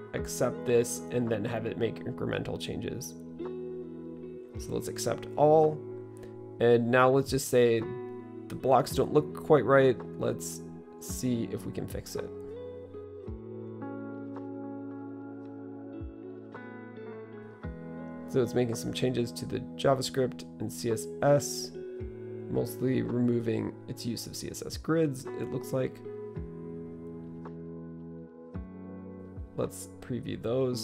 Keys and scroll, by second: 8.1-12.6 typing, 14.3 Return.